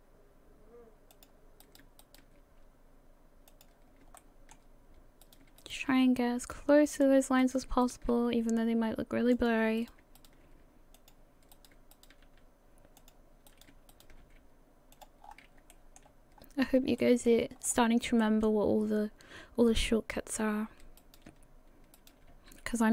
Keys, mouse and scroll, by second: 1.6 right click, 2.0 shift+right click, 2.4 g, 4.2 shift+middle click, 5.2 right click, 5.6 shift+right click, 5.9 g, 7.4 right click, 7.8 shift+right click, 8.1 g, 9.8 right click, 10.2 shift+right click, 10.9 g, 11.5 right click, 11.9 shift+right click, 12.2 g, 13.9 shift+right click, 14.2 g, 15.2 scroll down 5, 15.7 shift+middle click, 16.4-16.8 scroll up 2, 17.2 shift+middle click, 17.5 scroll up 4, 18.2 shift+middle click, 21.0 right click, 22.0 shift+right click, 22.3 g.